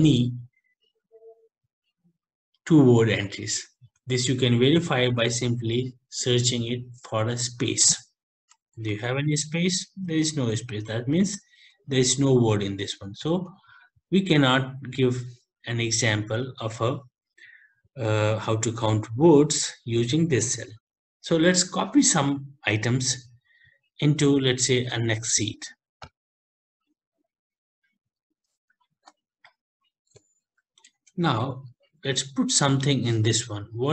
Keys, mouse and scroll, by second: 3.6 ctrl+shift+Down, 5.7 ctrl+f, 8.8 Return, 12.1 Escape, 12.9 Escape, 13.2 Escape, 26.4 click, 28.8 ctrl+shift+Down, 29.9 Delete, 33.5 click.